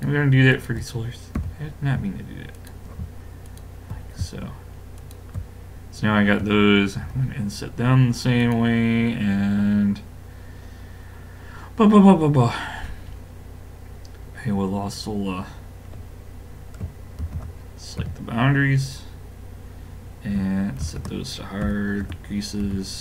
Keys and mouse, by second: 1.4 a, 2.6-6.9 drag, 7.0 i, 17.2 ctrl+e, 20.8 shift+e, 22.6 a.